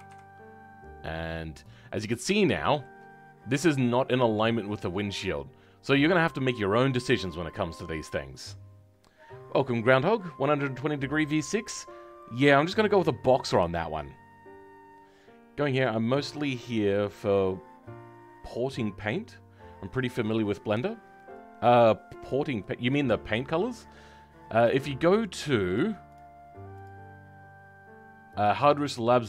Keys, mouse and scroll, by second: 1.8 scroll.